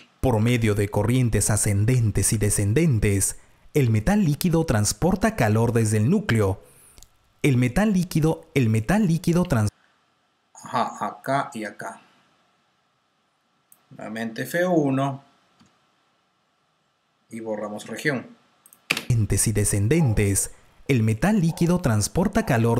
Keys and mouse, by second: 1.6 click, 1.6-2.7 typing, 9.4-10.7 typing, 11.3 click, 11.9-12.6 typing, 15.5 F1, 17.8 Delete, 18.9 click, 18.9 space, 22.6 click.